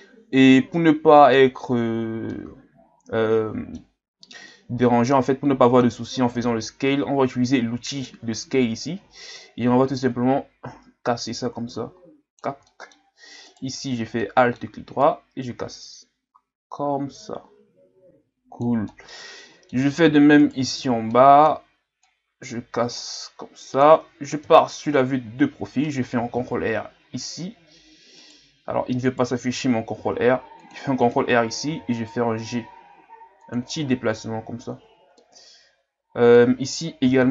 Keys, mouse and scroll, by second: 1.9-2.3 scroll down 1, 2.3-4.1 middle drag, 4.1-4.5 scroll up 1, 4.5-7.9 middle drag, 7.9-12.6 drag, 12.6 middle click, 13.5 alt+right click, 14.2 middle click, 15.0-18.9 drag, 18.9-20.4 middle drag, 20.4 alt+right click, 21.1 middle click, 22.0-24.4 drag, 24.4 KP_3, 26.1 ctrl+r, 29.0 right click, 29.9 ctrl+r, 31.7 g, 34.0 ctrl+scroll down 2, 35.2-37.0 middle drag, 37.0 ctrl+r.